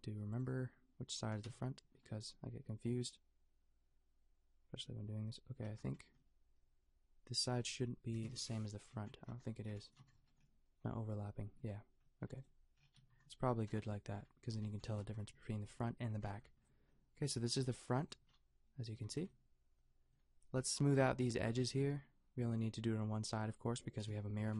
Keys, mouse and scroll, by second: 1.4 KP_5, 8.1 KP_5, 11.1 middle click, 11.6 middle click, 13.1 a, 16.6-18.2 middle drag, 18.9 a, 23.2 click, 24.0 KP_5.